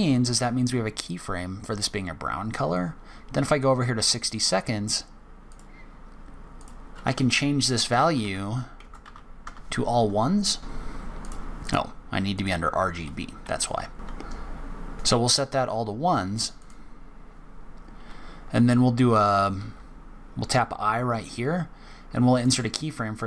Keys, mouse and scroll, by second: 2.7 click, 5.5 click.